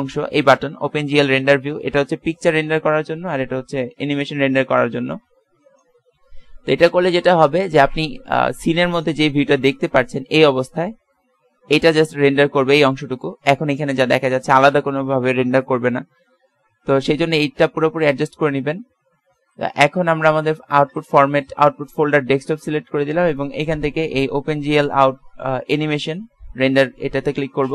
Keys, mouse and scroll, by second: 1.1 a, 8.5-9.8 middle drag, 10.6 click, 11.6-16.6 middle drag, 20.7 click.